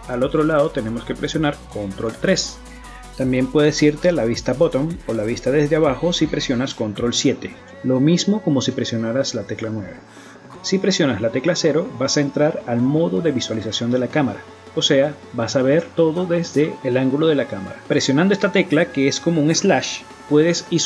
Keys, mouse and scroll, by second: 0.1 ctrl+KP_3, 4.9 ctrl+KP_7, 11.1 KP_0, 18.9 KP_Divide, 19.8 KP_Divide, 20.1 middle click, 20.4 KP_5.